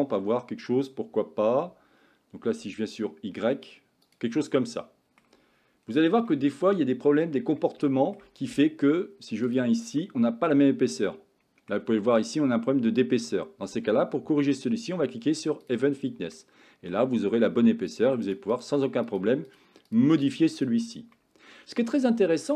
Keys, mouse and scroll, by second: 4.5 middle click, 6.3 shift+middle click, 7.0 Tab, 7.6-8.2 middle drag, 9.5 click, 10.0-11.8 middle drag, 15.7 click, 16.4-17.0 middle drag, 18.0 click, 18.3 click, 18.5 click, 19.2 click, 19.9 click, 20.2 click, 20.6 click, 21.3-22.0 middle drag.